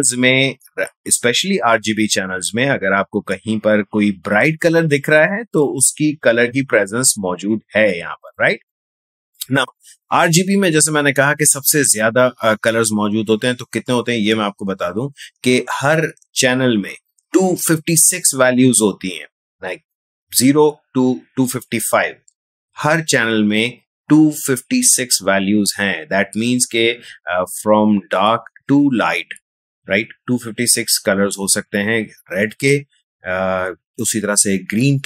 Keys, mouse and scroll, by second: 8.2 click.